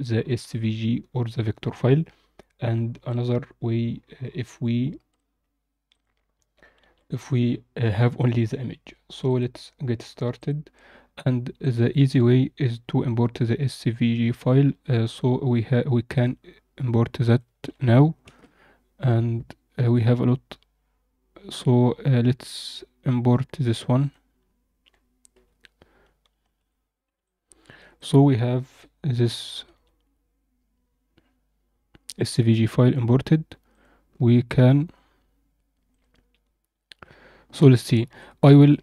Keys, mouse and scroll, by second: 8.1 click, 11.5-16.3 drag, 25.3 KP_Decimal, 26.2 a, 26.5 KP_Decimal, 27.2-27.7 alt+middle drag, 27.9 click, 28.7 KP_7, 33.6 click, 34.5 z, 35.8 click, 36.8 z, 38.1-38.8 alt+middle drag.